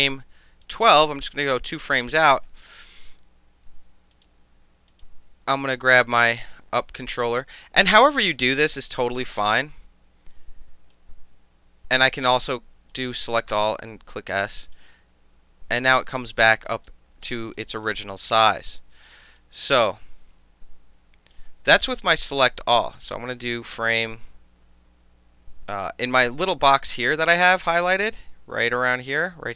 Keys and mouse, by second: 1.7 click, 4.1 click, 4.9 click, 5.9 click, 6.0-6.4 middle drag, 6.4 click, 6.5-7.2 middle drag, 7.2 click, 7.3-8.4 middle drag, 8.4-9.2 drag, 9.2 middle click, 9.4 s, 10.9-12.0 drag, 12.9 click, 13.5 s, 14.7-15.8 drag, 16.2 alt+drag, 16.2 alt+right drag, 16.5 alt+middle drag, 17.6 alt+click, 19.4-21.3 drag, 22.8 click, 26.9 click, 27.5 click, 28.0 middle click.